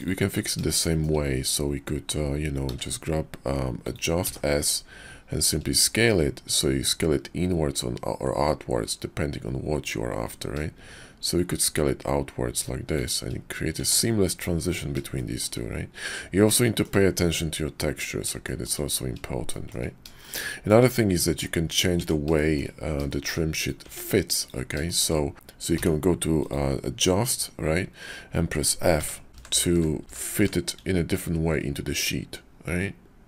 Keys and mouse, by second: 0.8 shift+middle click, 2.6 d, 13.7 Tab, 14.2-15.2 middle drag, 15.2 shift+drag, 16.6 shift+drag, 18.4 shift+drag, 18.5 shift+middle click, 19.5 shift+drag, 20.2-20.7 shift+drag, 21.3 Tab, 21.9 Tab, 22.4 shift+drag, 23.1 shift+click, 23.9 Tab, 24.3 click, 24.9 shift+click, 25.3 d, 25.7 d.